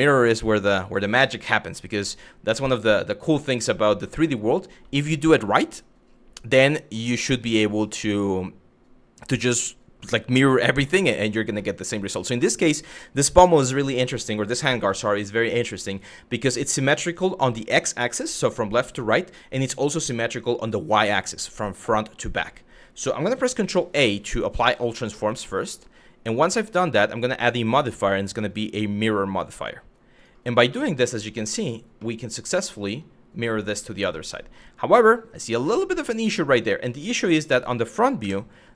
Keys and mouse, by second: 3.1-4.5 middle drag, 11.3 middle click, 23.2 ctrl+a, 25.4 middle click, 27.0-29.9 drag, 30.4 middle click, 31.1 shift+middle drag, 31.6-32.6 middle drag, 33.9 middle drag, 36.1 click, 36.9 KP_1, 36.9 KP_4, 37.8 KP_1, 38.6 shift+middle drag.